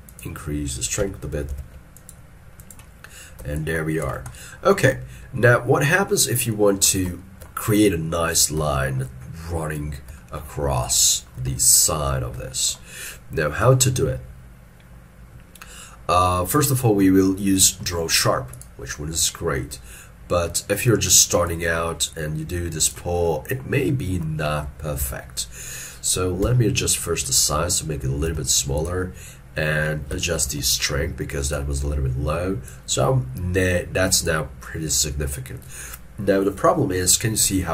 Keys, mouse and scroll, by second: 1.3 click, 1.6 ctrl+z, 3.6 shift+click, 4.4 middle click, 6.5 ctrl+middle click, 7.2 shift+middle click, 8.8 shift+middle click, 10.2 shift+middle click, 11.1 shift+middle click, 12.5 shift+middle click, 23.3 middle click, 25.1 ctrl+z, 26.5 f, 30.4 shift+f.